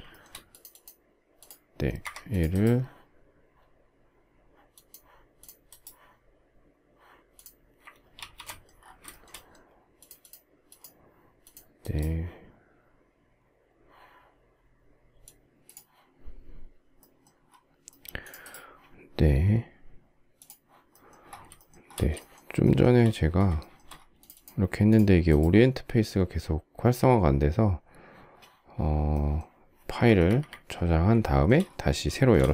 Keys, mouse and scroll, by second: 0.2 shift+double middle click, 2.0 Escape, 8.1 ctrl+shift+g, 8.4 ctrl+shift+middle click, 9.1 shift+middle click, 21.3 shift+middle click, 21.6 shift+scroll, 22.0 shift+middle click, 22.4 shift+middle click, 22.5 shift+double middle click, 23.3 shift+double middle click, 29.8 Escape, 31.0 shift+middle click, 31.9 shift+middle click, 32.0 shift+middle click.